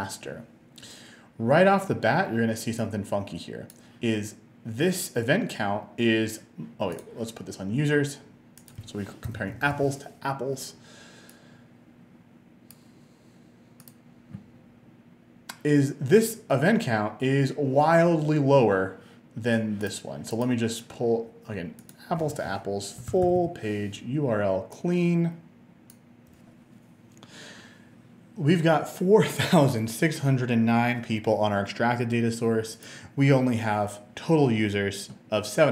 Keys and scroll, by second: 9.1-10.2 typing, 22.8-23.8 typing.